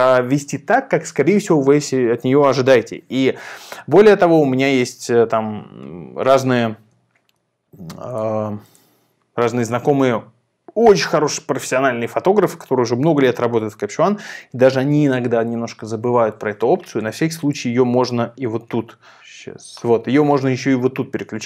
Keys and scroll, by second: 3.8 super+a, 4.6 super+r.